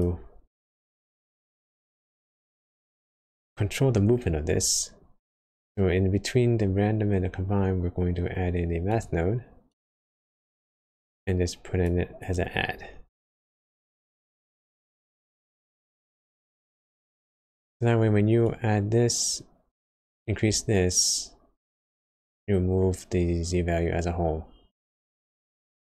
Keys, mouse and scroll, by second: 3.2 click, 3.2-3.6 scroll down 1, 4.0 middle click, 4.0 scroll down 3, 4.5 scroll up 1, 5.2 click, 7.5 shift+a, 10.7-16.8 click, 16.8-17.1 scroll down 3, 17.2 middle click, 17.5 scroll up 1, 18.3 scroll up 1, 18.4 click.